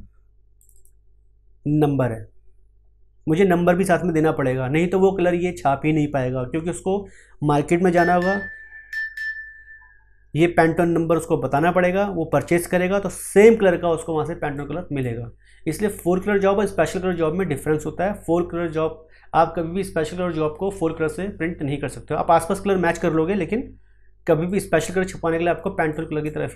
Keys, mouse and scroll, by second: 0.5 click, 14.5-26.5 drag.